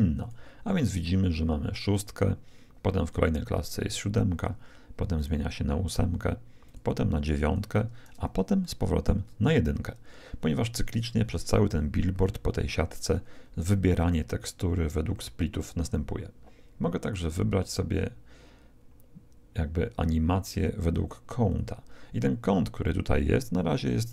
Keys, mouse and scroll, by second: 3.1-5.0 drag, 5.1-9.3 drag, 8.6-10.3 middle drag, 17.1-19.0 drag, 23.7-24.1 drag.